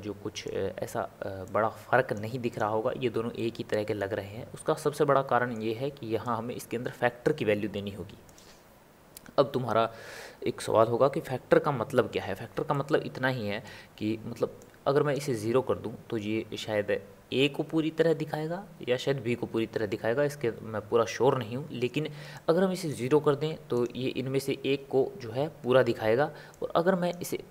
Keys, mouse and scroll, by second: 1.4 click, 2.7 click, 3.3 middle click, 4.3-4.8 scroll up 2, 4.8-6.4 middle drag, 6.4 click, 12.7-14.6 middle drag, 14.6-17.7 drag, 22.3-23.9 drag, 26.5-27.5 drag.